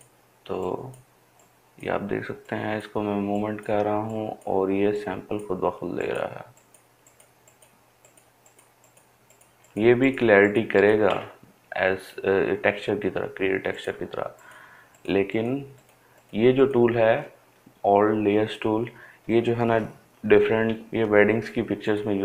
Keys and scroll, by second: 20.9 ].